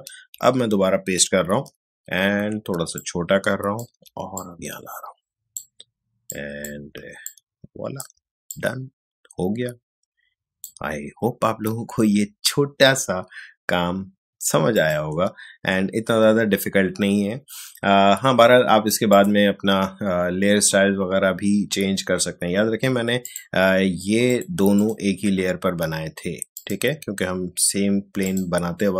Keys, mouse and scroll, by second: 0.3 ctrl+v, 3.0-7.2 alt+shift+drag, 7.2-13.0 alt+shift+drag, 14.7 click, 19.1 click, 23.2 click.